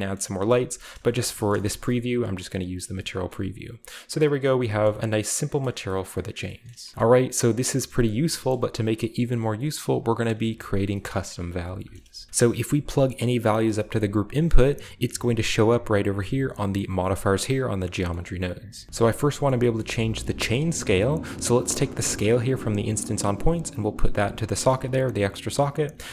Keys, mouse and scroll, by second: 0.1 middle click, 0.4 z, 0.8-1.7 scroll up 1, 0.9 middle drag, 1.1 shift+middle click, 1.5 middle click, 1.7-3.4 shift+middle drag, 1.7 scroll down 1, 1.9 shift+scroll up 1, 1.9-2.6 shift+scroll down 1, 2.6-4.2 scroll up 1, 4.2-5.5 scroll down 1, 5.7 shift+middle click, 6.0-6.4 middle drag, 6.2-6.9 right drag, 6.8 ctrl+middle click, 6.9 ctrl+space, 7.0 ctrl+space, 7.6 scroll up 1, 7.9 middle click, 8.5 middle click, 8.6-9.3 scroll up 1, 9.7 middle click, 11.0 middle click, 11.0-13.1 scroll up 2, 11.6 a, 12.5 g, 13.5-14.7 drag, 14.0 g, 16.5-17.1 drag, 18.1-18.7 middle drag, 18.9 middle drag, 18.9 scroll up 1, 19.5 middle click, 19.8-20.2 middle drag, 20.4-21.6 middle drag, 21.8-22.6 middle drag, 23.0-25.8 drag.